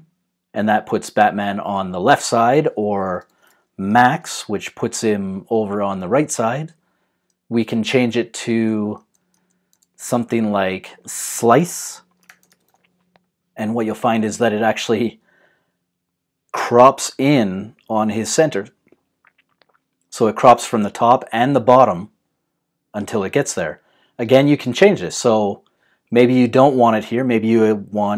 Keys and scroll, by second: 2.1-4.5 typing, 8.5 super+z, 12.0-13.1 typing.